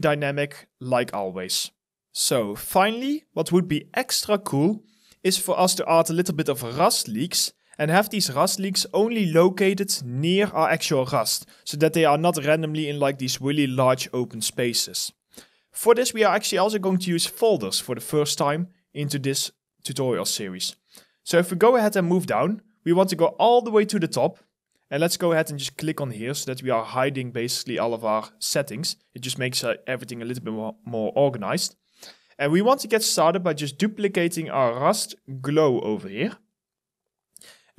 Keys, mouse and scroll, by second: 0.2 alt+right click, 11.2 alt+click, 11.8 alt+middle click, 12.3 alt+right click, 14.6 alt+right click, 15.1 alt+click, 15.4 alt+middle click, 16.0 alt+right click, 16.4 alt+click, 16.9 alt+middle click, 17.4 alt+right click, 17.9 alt+click, 22.2-23.1 scroll up 1, 34.3 right click.